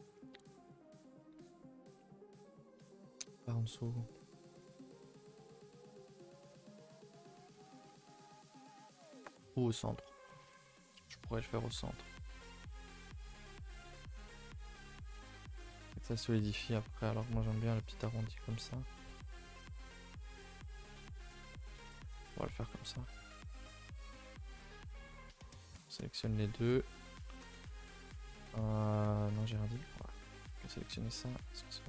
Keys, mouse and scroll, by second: 10.9 middle click, 11.6 ctrl+r, 13.1 click, 13.5 Tab, 13.8 middle click, 14.4-14.7 scroll down 2, 14.7 middle click, 15.0 scroll down 4, 15.2 middle click, 15.4 scroll up 4, 15.9 ctrl+z, 16.2 ctrl+z, 17.2 click, 17.5 Tab, 18.1-18.6 scroll down 5, 18.6-19.3 middle drag, 19.3 scroll up 5, 21.0 click, 21.3 Tab, 21.5 middle click, 21.7-22.0 scroll up 2, 22.0 shift+middle click, 22.6 alt+click, 22.9 middle click, 23.5 alt+click, 24.1 alt+click, 24.5 shift+middle click, 24.9 a, 25.0 a, 25.3 3, 25.6 alt+Left, 26.0-26.4 scroll down 2, 26.4-27.4 middle drag, 27.4 2, 27.9-28.8 scroll up 2, 28.8 alt+Left, 29.3 Tab, 29.8 Left, 30.4 ctrl+i, 30.6 h, 30.8 Tab, 31.1 a, 31.3 a.